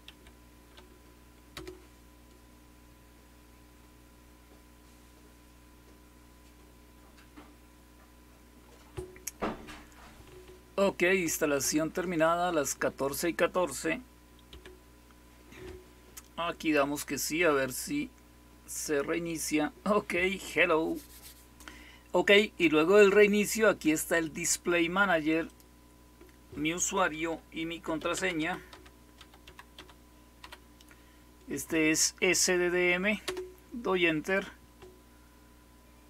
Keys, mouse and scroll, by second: 0.0 typing, 1.5 Return, 14.4 typing, 25.3 click, 27.2-30.3 typing, 33.2 Return.